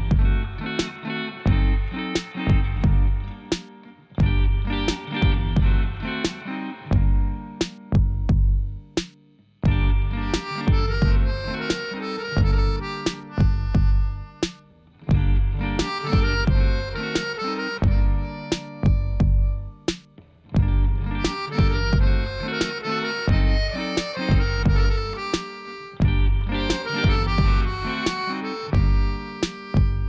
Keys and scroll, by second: 0.8 g, 1.0 y, 23.7 5, 24.0 Return, 25.3 alt+a.